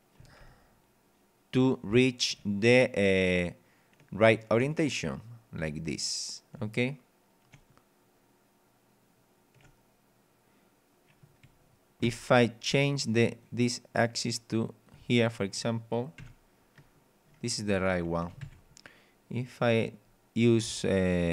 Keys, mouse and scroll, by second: 0.2 w, 0.4 a, 5.6 d, 6.6 w, 12.0 Escape, 13.3 click, 14.6 click, 15.9 click, 16.2 p, 17.7 d, 18.4 Escape, 18.4 a, 19.4 click.